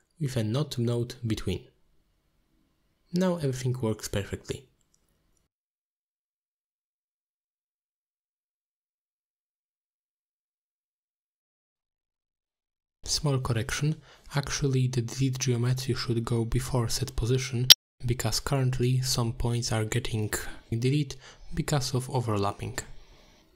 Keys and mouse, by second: 0.3 click, 0.9-1.5 drag, 2.2 alt+shift+click, 3.1 middle click, 3.5 z, 4.3-4.7 shift+middle drag, 5.5 g, 6.2 click, 11.5 g, 13.3 shift+d, 15.1 click, 15.5 ctrl+x, 16.0 middle drag, 16.5 click, 17.0-17.4 drag, 18.0-18.5 drag, 18.8 click, 19.4-20.2 drag, 20.7 click.